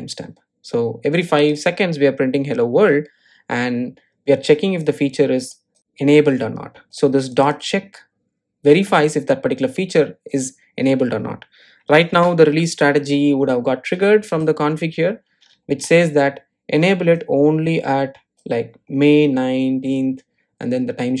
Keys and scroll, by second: 9.7 super+b.